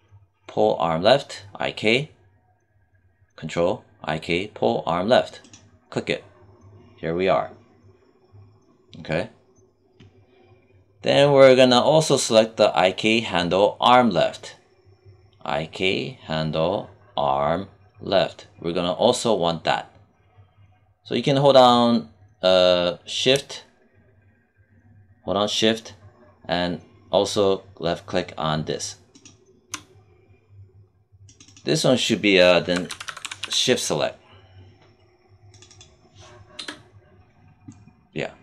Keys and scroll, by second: 32.6 s, 36.5 BackSpace.